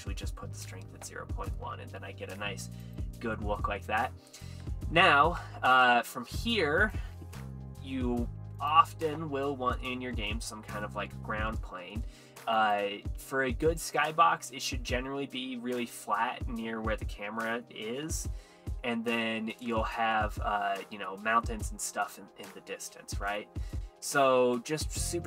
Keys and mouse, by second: 2.9 click, 3.4-3.7 middle drag, 4.9 middle click, 6.9 shift+a, 7.8 s, 8.6 click, 10.5 middle click, 11.3 middle click, 12.1 s, 12.6 click, 13.7 `, 17.2 middle click, 19.8 Tab, 21.1 click, 22.1 Tab, 22.1 middle click, 23.4 shift+middle click, 24.4 Tab, 24.8 Tab.